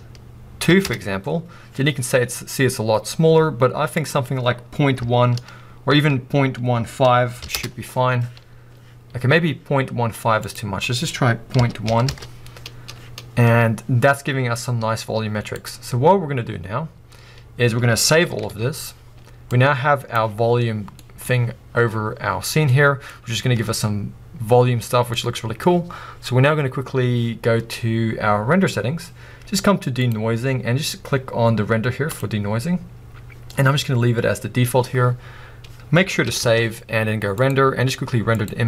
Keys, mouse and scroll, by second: 1.2 Return, 4.3 click, 7.9 Return, 9.9-16.5 drag, 12.4 Return, 15.1 z, 16.1-16.5 scroll up 1, 17.4-17.8 scroll down 1, 19.7 click, 20.4 click, 20.7 scroll down 2, 21.0-32.1 middle drag, 21.4-22.7 scroll down 2, 23.2-24.5 scroll up 2, 32.1 click.